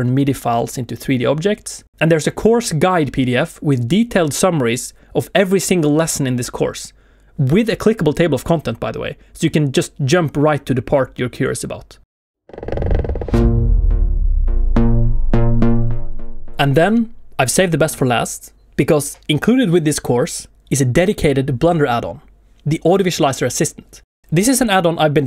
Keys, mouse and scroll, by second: 0.5 shift+middle click, 1.1 shift+middle click.